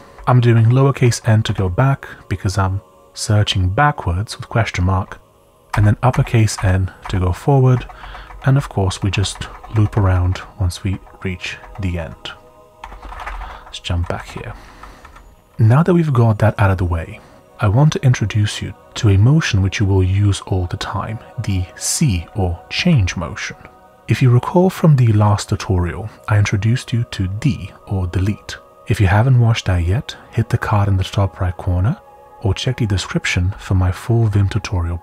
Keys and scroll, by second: 0.0-1.0 typing, 5.7 shift+n, 6.1 shift+n, 6.5 shift+n, 8.1 shift+n, 12.5-15.5 typing, 16.7 typing, 22.8-23.8 typing, 32.1-32.8 typing, 34.2 typing.